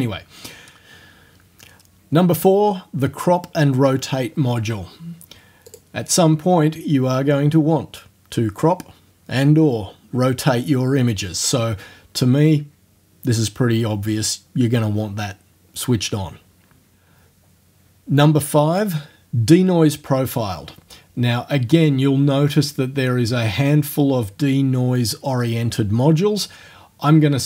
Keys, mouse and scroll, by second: 5.7 click, 20.6-21.1 scroll down 2, 21.4 scroll down 1.